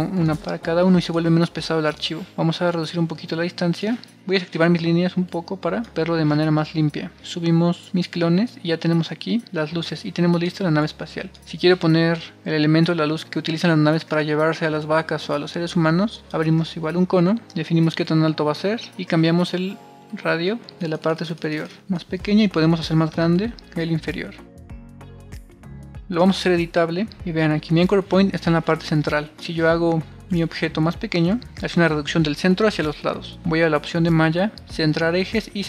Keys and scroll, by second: 26.5 c, 31.8 super+z.